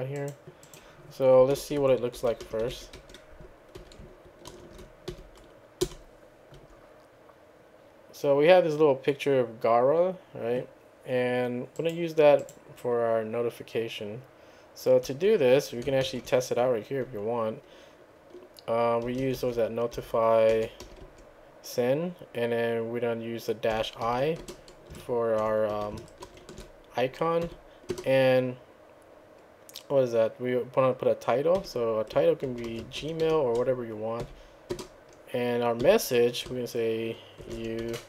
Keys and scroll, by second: 1.2-4.3 typing, 4.5 ctrl+v, 5.6-7.1 typing, 16.1 ctrl+c, 18.9-20.9 typing, 21.1 Tab, 23.8-24.1 typing, 25.8 typing, 26.3 ctrl+v, 27.2-28.0 typing, 32.3-34.3 typing, 35.9 typing, 37.2-38.0 typing.